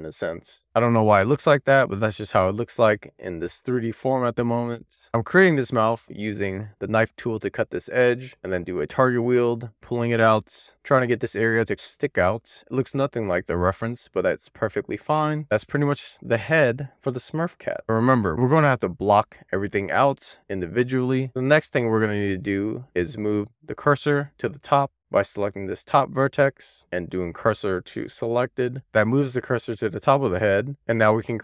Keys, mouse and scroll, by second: 0.0 shift+click, 0.2 shift+middle click, 1.5 shift+click, 1.9 shift+click, 2.6 shift+click, 3.1 middle click, 4.1 shift+middle click, 5.0-6.3 scroll up 1, 7.9 middle click, 8.3 alt+Tab, 8.4 alt+q, 9.1 Tab, 9.1 middle click, 9.9 click, 12.0 middle click, 12.4 click, 12.8 middle click, 13.4 click, 13.8 middle click, 14.3 click, 15.4 middle drag, 15.6-15.9 scroll down 3, 15.9 alt+middle click, 16.3 scroll up 3, 17.0 click, 17.7 click, 19.1 click, 21.2 Tab, 21.5 click, 21.8 middle click, 23.6 middle click, 24.1 middle click, 24.6 Tab, 25.3 Tab, 27.0 shift+s, 29.5 alt+middle click, 29.9 alt+middle click, 30.7 Tab.